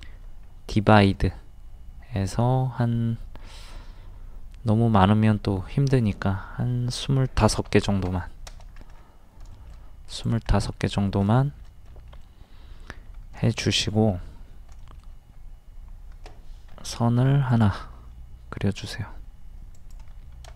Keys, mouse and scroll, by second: 0.9 click, 7.4 KP_2, 7.7 KP_5, 8.9 scroll down 1, 9.5 shift+middle click, 10.1 click, 10.5 middle click, 11.4 shift+middle click, 12.6 scroll up 1, 13.4 shift+middle click, 13.9 scroll up 1, 14.8 shift+middle click, 17.5 click.